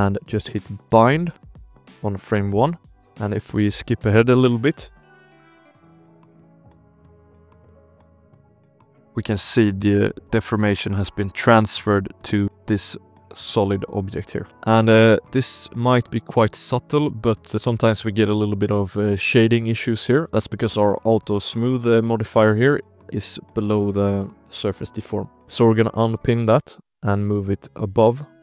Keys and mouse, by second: 0.8 click, 2.6 space, 2.9 shift+drag, 3.8 shift+middle drag, 4.9 space, 5.2 shift+middle drag, 5.4 space, 5.7 space, 6.0 shift+middle drag, 7.0 ctrl+i, 7.7 h, 8.2-8.7 drag, 8.7 KP_Decimal, 9.2 alt+a, 9.4-10.8 drag, 10.8 middle click, 11.0 space, 11.3 space, 11.5 shift+middle drag, 11.7 shift+click, 12.1 drag, 12.4 space, 13.1 shift+drag, 13.4 click, 13.8 drag, 14.2 shift+drag, 14.4 alt+a, 14.4 space, 14.8 space, 15.2 shift+click, 15.3 space, 15.7 click, 16.7 alt+a, 17.0 ctrl+s, 17.2 drag, 17.6 shift+click, 17.9-19.0 drag, 20.9 click, 22.4 click, 25.6-28.4 drag.